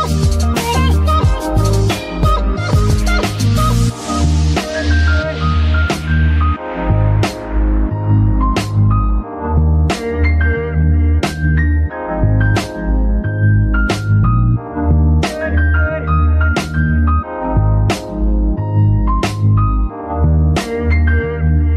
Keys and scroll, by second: 6.1 shift+-, 7.4-11.5 typing, 15.6 g, 17.4 shift+s, 18.9 shift+s, 20.4 shift+s.